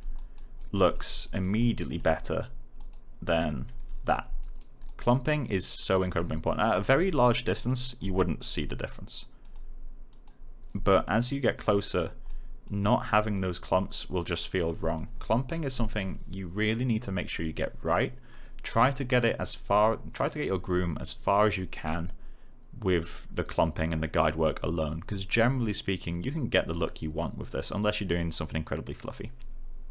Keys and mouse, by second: 0.5 right click, 0.9 alt+middle click, 1.2 alt+right click, 1.5 alt+click, 4.3 alt+right click, 4.8 alt+click, 6.6 alt+right click, 7.9 alt+click, 10.8 alt+right click, 12.2 alt+click, 12.7 alt+right click, 13.3 alt+click.